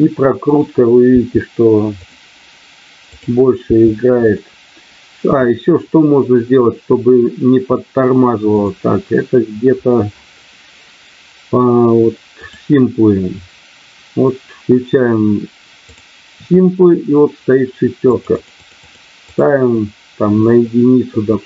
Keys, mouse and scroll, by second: 0.4 click, 2.1 i, 3.1 click, 8.6 click, 12.4 click, 15.8 click, 18.1 click, 18.8 click, 19.2 click.